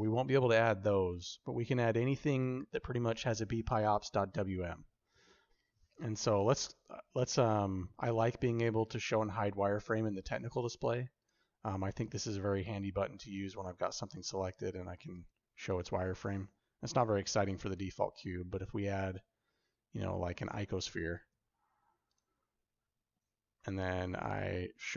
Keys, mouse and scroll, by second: 11.1 click, 11.9 click, 13.9 click, 14.6 click, 15.4 click, 17.4 shift+a, 21.1 g, 24.6 click.